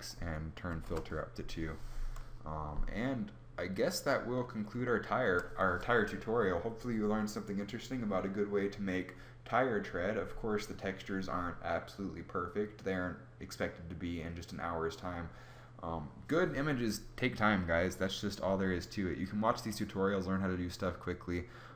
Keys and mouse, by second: 3.8 middle click.